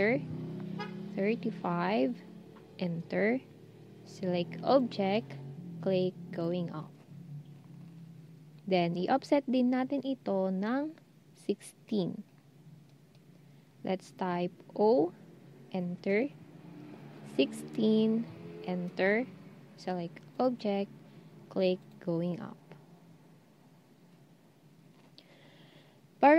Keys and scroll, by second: 0.9-1.6 typing, 14.8 0, 17.0-17.7 typing.